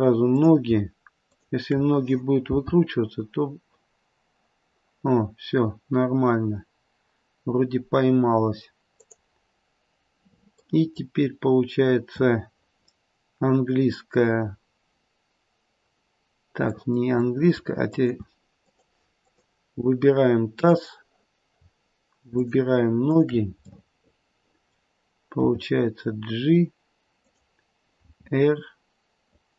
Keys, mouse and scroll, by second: 0.2 click, 1.2 shift+click, 2.4 g, 10.0-10.6 scroll down 1, 10.6 middle click, 11.4 middle click, 12.1 middle click, 16.7 middle click, 17.0 middle click, 17.5 a, 17.8 click, 18.5 a, 19.2 click, 21.0 click, 22.3 shift+click, 22.9 shift+click, 23.5 shift+click, 23.6 middle click, 23.8 middle click, 25.4 g, 28.0 r.